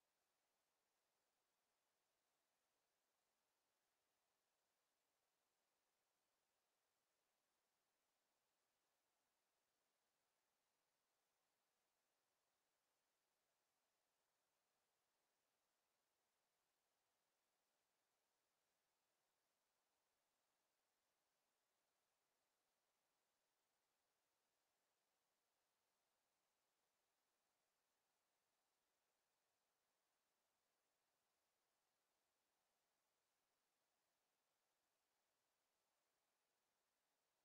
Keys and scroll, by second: 23.3 w, 26.5-27.4 typing, 30.9 a, 31.7 `, 31.9 Escape.